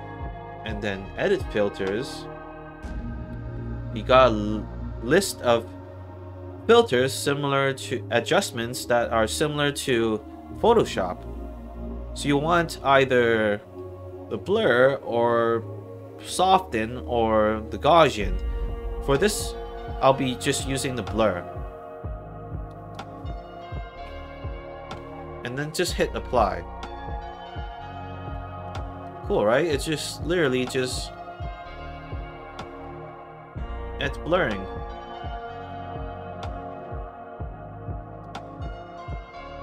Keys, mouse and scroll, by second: 1.3 click, 3.4 click, 6.0 middle click, 6.0 scroll down 2, 20.2 click, 22.6 click, 23.9 KP_5, 26.2 click, 28.6 alt+click, 29.2 alt+right click, 29.7 alt+middle click, 30.0 alt+right click, 30.3 alt+click, 31.2 alt+middle click, 31.5 alt+right click, 34.2 click, 36.7-38.1 drag, 38.9 click.